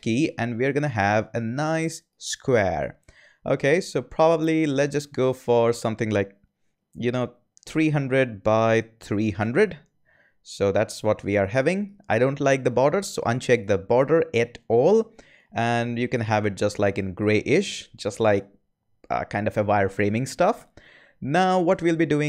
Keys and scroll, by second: 7.3-9.4 typing, 8.3 Tab.